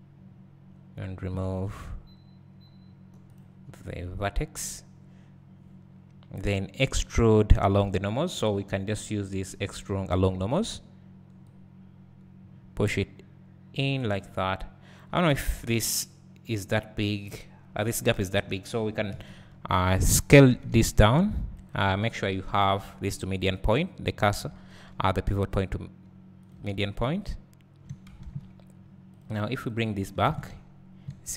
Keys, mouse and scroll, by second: 3.3 click, 7.7 `, 10.1-15.8 drag, 15.3 `, 16.0 click, 19.1 ctrl+KP_Add, 20.5 s, 21.6 right click, 24.4 s, 26.7 Tab, 26.9 scroll down 2, 27.2 `, 29.1 click, 30.2 alt+a, 31.2-31.3 scroll up 1.